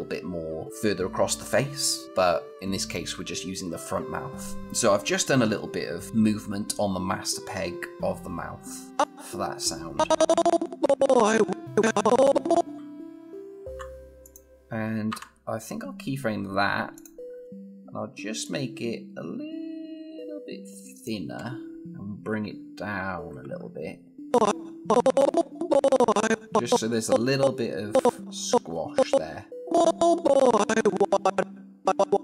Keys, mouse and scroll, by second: 5.8 click, 8.9-12.7 click, 13.4 F6, 14.0 click, 14.9 F6, 18.2-21.1 drag, 22.1 scroll down 1, 24.1-29.5 drag.